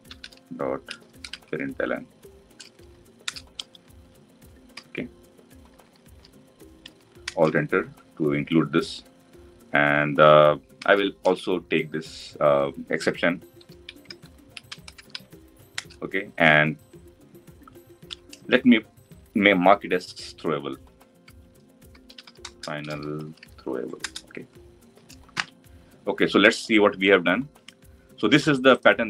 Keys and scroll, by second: 3.0 Return, 7.0 Return, 10.5 ctrl+alt+v, 23.8 Return, 25.1 ctrl+alt+l.